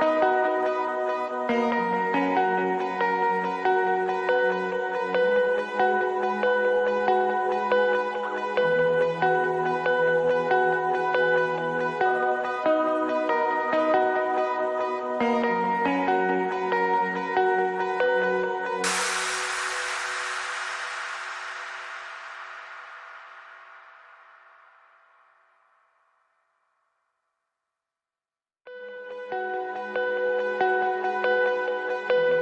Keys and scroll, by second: 1.1 ctrl+g, 1.4 Escape, 2.6 ctrl+g, 3.1 g, 4.5 ctrl+g, 6.0 ctrl+g, 7.4 f, 8.4 ctrl+c, 9.6 r, 9.7 BackSpace, 9.9 y, 10.0 Escape, 10.2 ctrl+c, 10.4 ctrl+v, 12.3 ctrl+c, 13.3 Escape, 14.1 s, 14.4 4, 16.0 Escape, 29.7 space, 31.9 Escape.